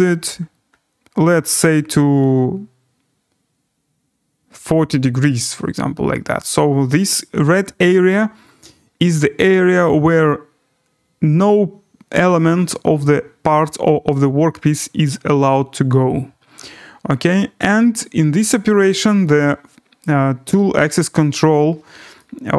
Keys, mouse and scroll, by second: 2.4 scroll, 3.1-3.5 scroll, 4.4-5.4 scroll, 5.4-6.0 scroll, 8.9-10.5 scroll, 10.5 scroll, 11.7 scroll, 12.4-12.7 scroll, 17.1 scroll, 18.4 scroll, 20.0 right click, 21.2 scroll.